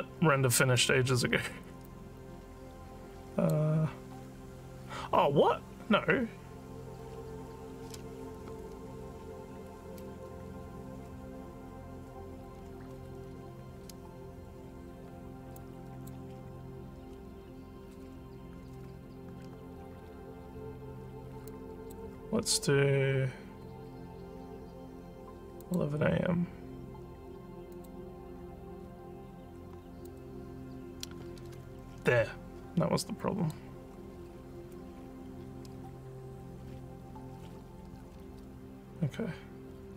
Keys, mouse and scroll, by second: 1.8-3.5 drag, 10.4 alt+middle click, 10.4 alt+scroll, 10.4 alt+scroll, 11.0 alt+middle click, 11.0 alt+scroll up 1, 11.7 alt+scroll up 1, 15.6 click, 21.5 click, 25.6 click, 27.7 click, 30.0 click, 33.2 click, 34.5 scroll down 1, 35.6 scroll down 1.